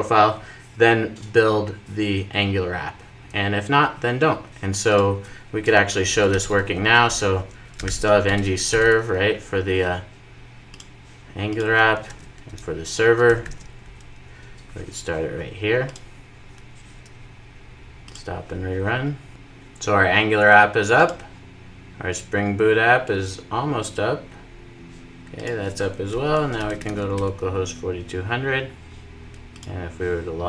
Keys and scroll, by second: 15.9 ctrl+r.